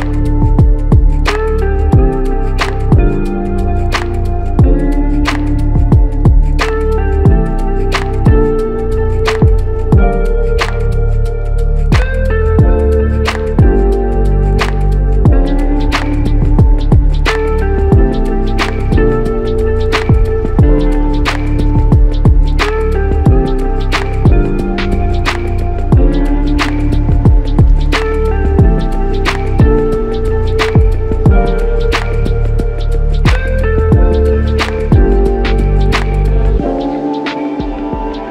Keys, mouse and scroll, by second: 4.9 alt+click, 12.3 alt+click, 16.0 alt+click, 20.4 double click, 22.1 alt+shift+click, 27.1 alt+click, 29.9 double click, 33.1 alt+shift+click, 36.4 double click, 37.6 r.